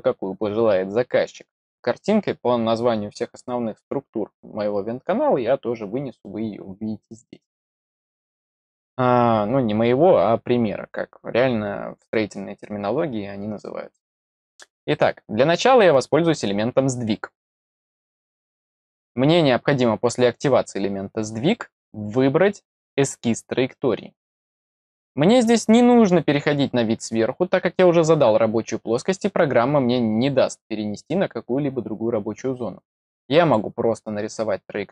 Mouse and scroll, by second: 17.5 click, 18.5-19.0 middle drag, 19.9 middle click, 24.1 click, 33.4 click.